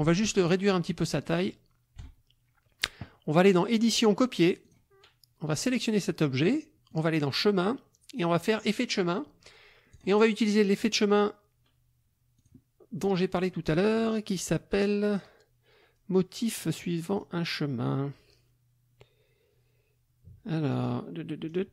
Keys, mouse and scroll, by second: 0.3-2.2 ctrl+drag, 3.8 click, 4.6 click, 5.6 click, 6.9 click, 8.7 click, 9.9 click, 12.3 click, 13.1 click, 14.5 scroll down 2, 15.2 scroll down 2, 16.0-16.3 scroll down 2, 16.6-17.4 scroll down 4, 20.7 scroll down 2, 21.5 scroll down 2.